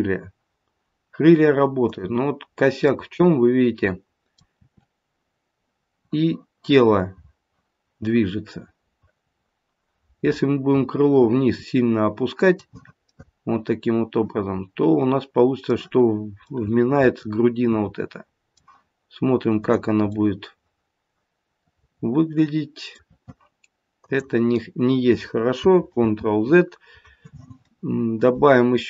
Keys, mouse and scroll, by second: 2.5-2.9 scroll up 2, 2.9 middle click, 4.6 r, 13.0 middle click, 16.5 middle click, 20.0 click, 20.1 middle click, 24.0 click, 25.8 ctrl+z, 28.2 click.